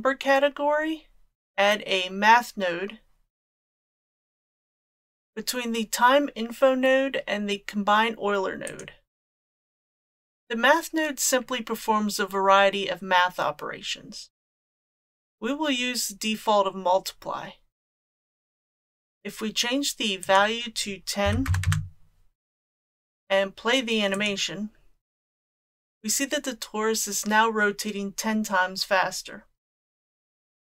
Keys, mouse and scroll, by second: 20.2-22.4 drag, 24.1 click, 30.3 click.